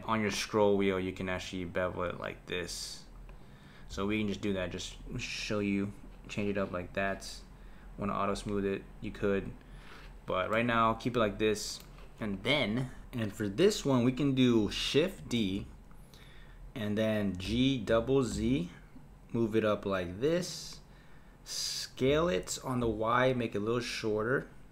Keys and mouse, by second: 3.9 Tab, 4.9-7.9 right drag, 8.1 click, 9.5 click, 10.5-12.3 middle drag, 12.3 click, 15.4 shift+d, 22.1 s.